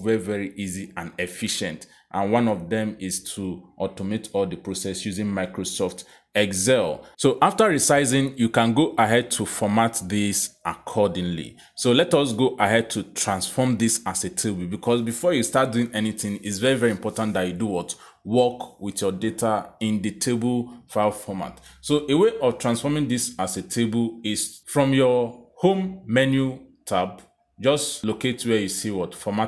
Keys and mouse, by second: 26.3 click.